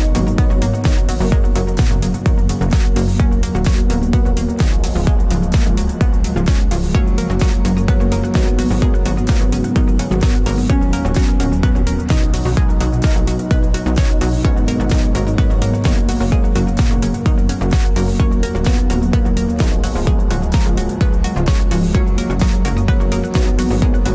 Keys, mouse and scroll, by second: 0.0 Tab, 0.4 3, 0.5 click, 0.7 i, 1.6 Tab, 1.8-3.0 middle drag, 3.0 shift+right click, 3.6 shift+a, 3.9 Tab, 4.0 s, 4.9 click, 5.5 s, 5.5 click, 5.7 Tab, 6.2 shift+d, 7.6 click, 8.1 g, 8.5 click, 8.8 middle click, 9.2 Tab, 9.3 scroll down 1, 9.5 click, 9.9 shift+middle click, 10.3-10.8 scroll down 1, 11.7-13.6 middle drag, 13.3-13.6 scroll up 2, 13.8 Tab, 14.0 2, 14.1 drag, 14.5 middle click, 14.8 shift+click, 15.4 shift+d, 15.8 p, 15.9 Tab, 16.2 click, 16.3 Tab, 17.5-20.0 drag, 17.9 Tab, 18.5 a, 20.2 Tab, 20.3 scroll up 1, 20.4-24.1 shift+middle drag, 20.9-21.2 scroll down 1, 21.2 g, 22.0 click, 22.4-22.7 scroll down 1, 23.9 g.